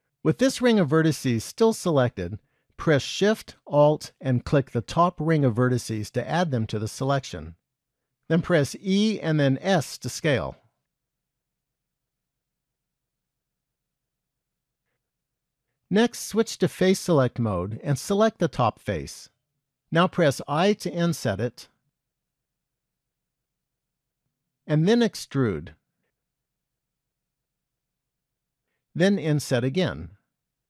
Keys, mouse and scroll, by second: 0.3 shift+middle click, 4.5 alt+shift+click, 8.5 e, 12.8 middle click, 13.7-14.4 scroll down 2, 14.4 shift+middle click, 17.2 click, 18.9 click, 24.8 e, 28.5 scroll down 1.